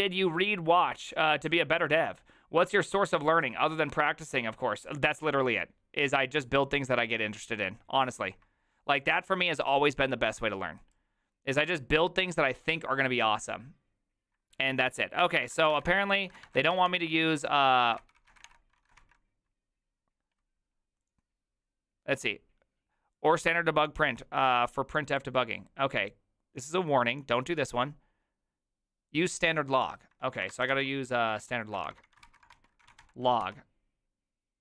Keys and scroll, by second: 15.2-19.0 typing, 18.0 ctrl+c, 30.2 ctrl+a, 30.5-33.9 typing, 30.7 ctrl+c.